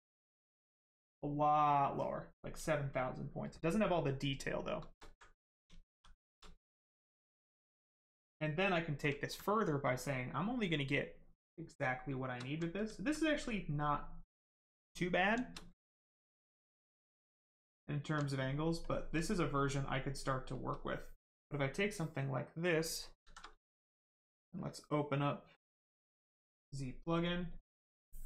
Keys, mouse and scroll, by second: 2.4 right click, 5.0 alt+right click, 5.6 shift+right click, 5.8 shift+f, 6.5 right click, 9.2 alt+right click, 9.7 right click, 9.8 right click, 12.4 alt+right click, 12.9 alt+right click, 13.4 right click, 13.4 right click, 15.3 shift+right click, 15.5 alt+right click, 16.1 right click, 16.2 right click, 16.8 alt+right click, 17.7 right click, 17.8 right click, 17.9 shift+right click, 18.2 alt+right click, 18.8 alt+click, 19.3 right click, 20.4 shift+right click, 23.2 shift+z, 24.2 click, 27.2 click.